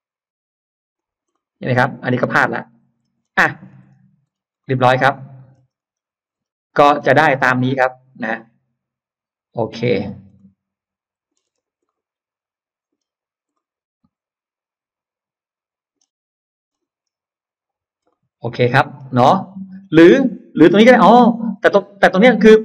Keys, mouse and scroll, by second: 0.8 click, 1.2-2.8 middle drag, 3.0 scroll down 1, 3.2 space, 3.2 middle click, 3.4 scroll up 1, 3.8-4.4 scroll down 2, 4.4 middle click, 5.4 scroll down 1, 5.8-6.1 scroll up 1, 6.3-7.2 scroll down 4, 7.5-9.6 middle drag, 9.6-10.5 scroll up 2, 10.4 middle click, 11.4 click, 11.5 space, 11.7-12.8 middle drag, 12.8-13.1 scroll down 1, 13.4-15.8 middle drag, 13.4-13.8 scroll up 1, 16.1-16.9 scroll up 2, 18.0 middle click, 19.0-19.8 scroll up 2, 20.8 ctrl+z, 22.2-22.6 scroll up 3.